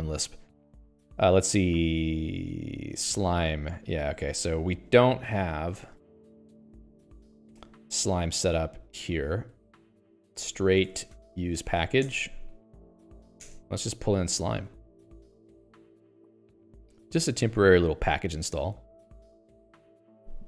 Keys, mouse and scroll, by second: 3.4 l, 4.4 ctrl+g, 5.0 Escape, 5.9 alt+x, 6.2 l, 7.0 Escape, 7.3 Escape, 7.4 Escape, 7.6 Escape, 10.4 alt+x, 10.5-13.6 typing, 12.6 Return.